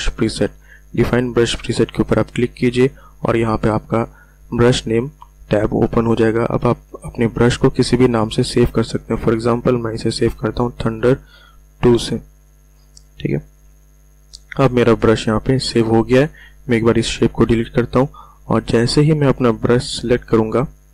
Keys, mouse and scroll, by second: 2.0 click, 8.7-9.6 typing, 10.8 space, 11.4 2, 13.3 click, 17.0 Delete, 20.3 b.